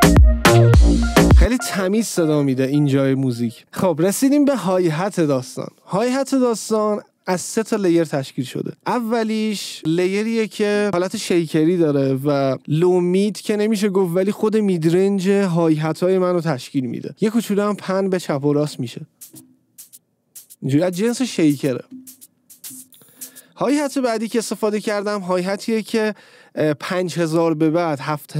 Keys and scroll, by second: 1.5 space, 19.0 space, 23.6 space.